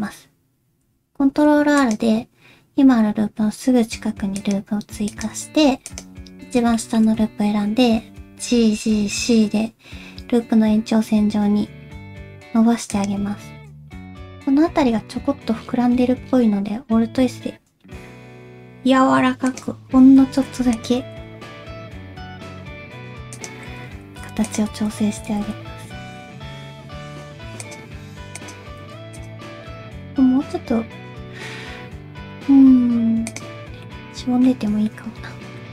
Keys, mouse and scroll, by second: 1.1 ctrl+r, 5.1 alt+click, 5.9 alt+click, 6.7 shift+middle click, 8.4 g, 13.5-14.0 scroll down 2, 14.0 alt+z, 14.0 alt+click, 14.0-14.4 scroll up 2, 14.8 alt+s, 20.2 alt+z, 20.7 alt+click, 21.3 alt+s, 24.0 alt+z, 24.5 alt+click, 25.3 alt+z, 25.7 alt+s, 28.4 alt+click, 29.1 alt+click, 29.8 alt+s, 33.6 scroll down 1, 33.8 middle click, 34.6-34.9 scroll down 2, 34.9 middle click.